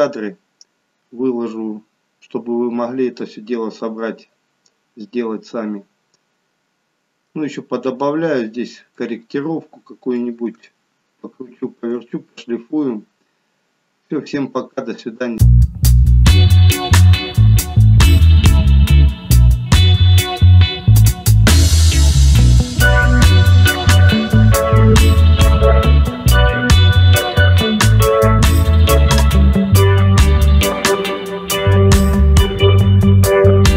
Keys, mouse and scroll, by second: 5.1-5.7 scroll down 1, 5.7 middle click, 9.1 middle click, 10.7 shift+middle click, 12.3-13.0 scroll up 1.